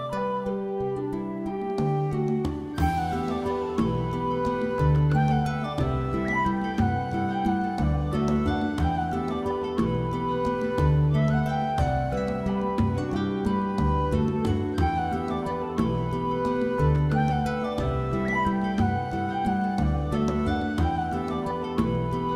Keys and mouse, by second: 0.2 click, 0.4 middle click, 0.9 middle click, 1.0-3.3 typing, 1.2 alt+click, 1.4 alt+z, 2.1 click, 2.7 click, 2.9 shift+click, 4.4 click, 5.2 m, 5.5 middle click, 5.7 alt+middle click, 5.9 alt+middle click, 6.2 click, 6.4 g, 6.6 click, 6.8 shift+click, 7.0 g, 7.5 click, 7.6 shift+middle click, 7.8 middle click, 8.4 middle click, 9.0 middle click, 9.4 click, 9.6 click, 9.7 middle click, 10.5 middle click, 11.7 ctrl+click, 12.1 middle click, 12.4 ctrl+click, 12.6 middle click, 13.0 click, 13.9 middle click, 14.3 g, 14.4 g, 15.1 click, 15.3 middle click, 15.6 alt+middle click, 15.7 alt+middle click, 16.2 shift+middle click, 16.6 shift+click, 16.8 shift+click, 17.3 shift+click, 17.7 shift+middle click, 18.1 shift+middle click, 18.4 alt+z, 18.6 click, 18.8 g, 19.3 click, 19.5 click, 20.1 middle click, 20.5 g, 21.2 click, 21.6 click, 21.7 g, 22.1 click.